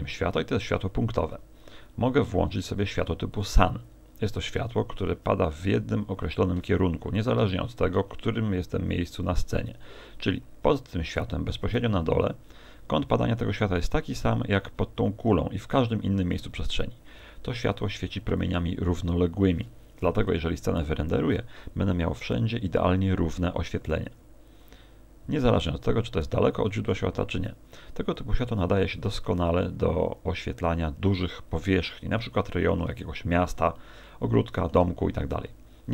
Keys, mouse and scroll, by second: 3.3 click, 7.4 r, 9.1 ctrl+click.